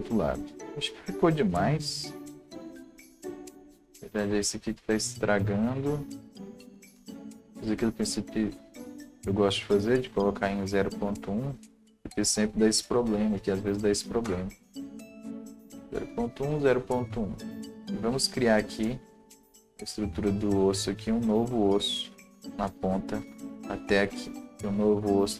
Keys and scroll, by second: 12.9-14.1 typing, 14.2 Return.